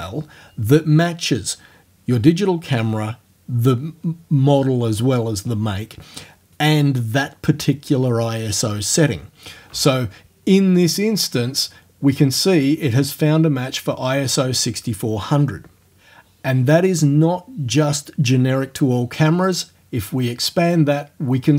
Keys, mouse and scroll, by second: 19.5 click.